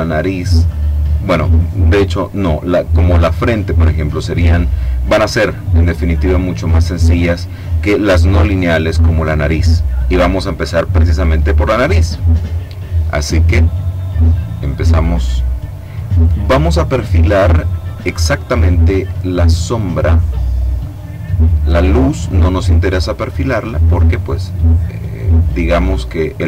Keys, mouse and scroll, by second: 12.2 click, 19.7 click, 20.6 click, 21.7 click, 22.5 click, 23.2 click, 23.8 click, 24.5 click, 25.7 click.